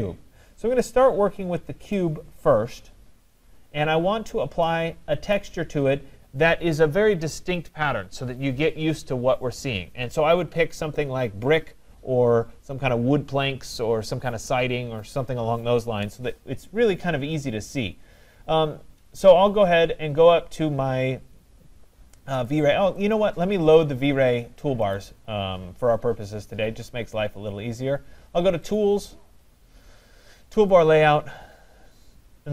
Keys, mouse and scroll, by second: 1.2 scroll, 1.9 right click, 3.7 scroll, 4.2 middle click, 4.3 middle click, 5.3 right click, 5.7 middle click, 5.8 middle click, 5.9 middle click, 9.0-9.3 scroll, 16.9 scroll, 17.0 middle click, 17.4 middle click, 17.5 middle click, 22.7 click, 23.1 click, 24.9 click, 28.8 click, 30.8 click.